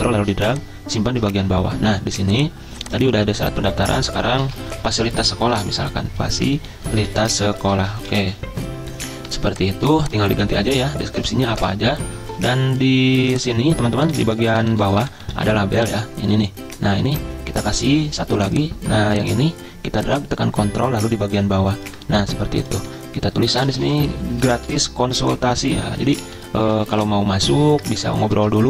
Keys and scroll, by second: 4.2-8.7 typing, 11.6 typing, 12.4 ctrl+z, 14.1 Delete, 14.2 Delete, 14.3 Delete, 14.4 Delete, 14.5 Delete, 14.6 Delete, 14.8 Delete, 14.9 Delete, 15.0 Delete, 15.2 Delete, 15.4 Delete, 15.7 Delete, 22.8 ctrl+a, 23.4-28.6 typing, 25.2 Return.